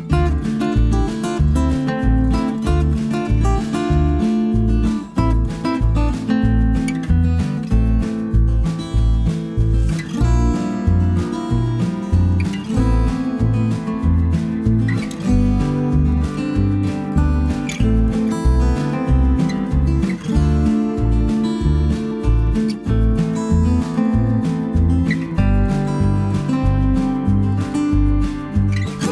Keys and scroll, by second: 0.2 b, 6.7 b, 7.7 s, 7.7 Page_Down, 8.1 Page_Up, 21.2 b, 26.9 b, 27.3 s.